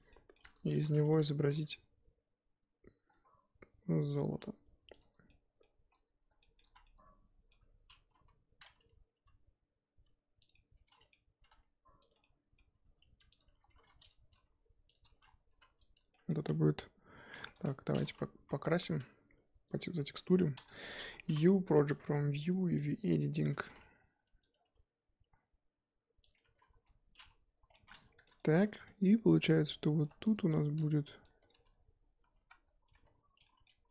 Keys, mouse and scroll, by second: 0.1-0.7 shift+middle drag, 0.7 s, 1.5 g, 4.3 s, 5.3-5.9 middle drag, 5.9-6.4 scroll down 1, 6.4 shift+middle click, 6.6 z, 6.8-8.1 middle drag, 8.1 KP_7, 9.2 g, 10.5 middle click, 11.4 g, 12.3-12.8 middle drag, 12.8 g, 13.4 scroll up 2, 13.7 1, 14.1 click, 14.3 g, 15.5 3, 15.9 click, 16.1-17.5 middle drag, 17.5 Tab, 18.0-18.3 scroll down 1, 18.3 KP_1, 20.2 drag, 20.3 Tab, 20.5 a, 21.9 u, 22.8 click, 23.5 s, 26.4 Tab, 26.8 z, 27.1-27.7 scroll up 2, 27.7 scroll down 1, 27.7-28.0 middle drag, 28.0 scroll up 1, 28.2 middle click, 28.8-29.2 shift+middle drag, 29.2-29.7 scroll up 4, 29.7 Tab, 30.0 middle drag, 30.2 scroll up 2, 30.5-31.4 shift+middle drag, 31.4 click, 32.4 ctrl+KP_Add.